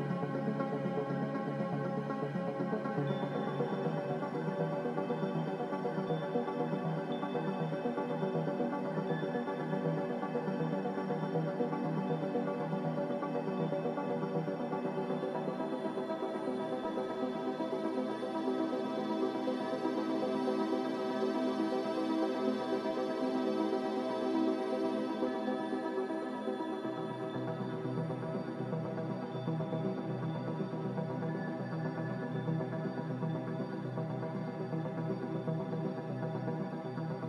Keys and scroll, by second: 9.9-10.8 typing, 11.3 ctrl+z, 16.0 ctrl+z, 17.0-17.7 typing, 21.8 Delete, 36.7-37.2 typing.